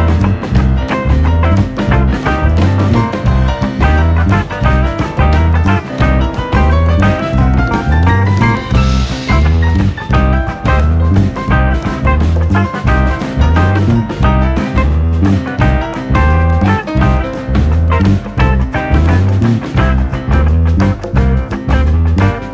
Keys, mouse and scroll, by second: 0.3 alt+/, 0.7 click, 1.9 scroll down 2, 2.1 middle click, 2.2 alt+/, 2.4 middle click, 2.7-3.1 scroll up 3, 3.2 r, 4.8 click, 6.6 r, 8.2 scroll down 2, 8.3 middle click, 8.7 click, 8.9-9.9 shift+middle drag, 9.9 KP_3, 10.2-10.9 scroll up 1, 10.9 scroll down 1, 11.1 shift+middle click, 11.3 click, 11.9 ctrl+r, 13.1 alt+/, 13.3 click, 14.8 g, 15.2 click, 15.7 s, 16.4 click, 17.1 s, 17.9 click, 18.4 s, 19.4 scroll up 1, 19.6 r, 20.3 click, 20.9-22.5 typing.